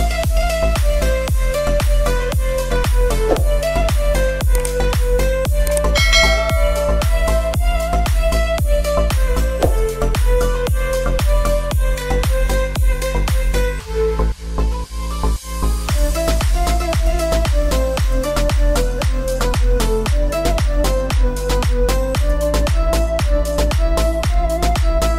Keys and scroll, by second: 5.6 Return, 5.9 space, 8.4 alt+space, 16.4 space.